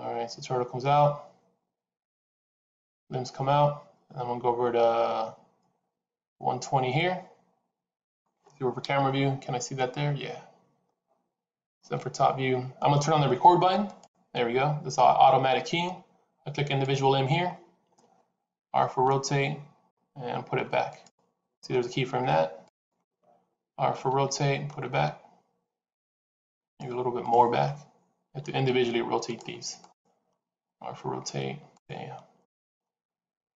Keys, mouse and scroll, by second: 11.7 KP_7, 13.8 click, 17.4-18.6 scroll up 2, 18.6 r, 22.5 click, 24.0 r, 27.1 click, 28.3 r, 29.7 click, 30.5 r, 32.5 click, 33.2 r.